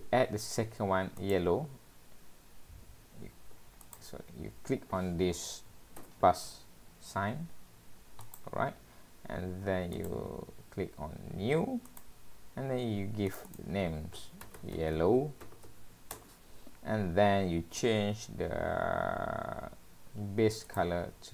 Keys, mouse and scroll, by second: 1.3 click, 3.9 click.